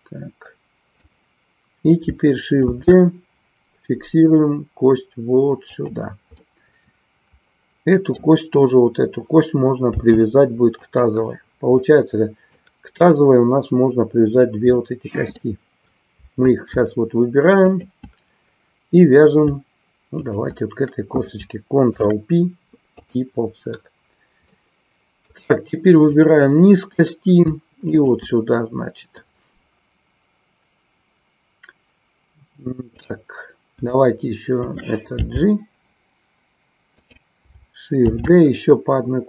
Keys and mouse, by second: 2.8 shift+d, 6.4-8.2 middle drag, 10.9 click, 11.9 middle click, 14.7 middle click, 17.6 shift+click, 20.3 shift+click, 22.0 ctrl+p, 24.4-25.4 middle drag, 27.9 shift+click, 36.9 click, 38.0 shift+d.